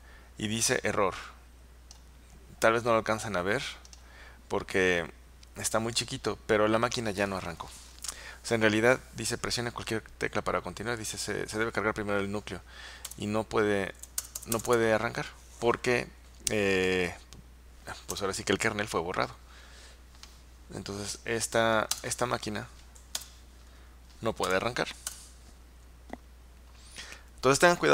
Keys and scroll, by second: 13.1 Return, 14.1 Return, 14.3 Return, 14.5 Return, 18.2 Return, 22.0 Return, 23.2 Return, 24.5 Return, 25.1 Return.